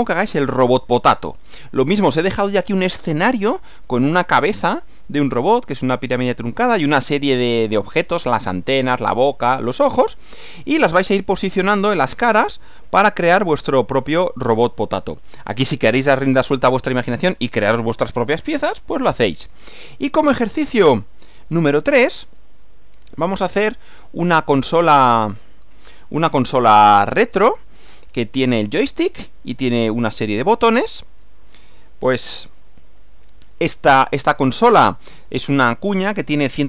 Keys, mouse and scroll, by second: 10.4 click, 12.8 Right, 21.8 click, 23.2 click, 23.6 Right, 24.8 click, 25.3 Right, 32.2 Right.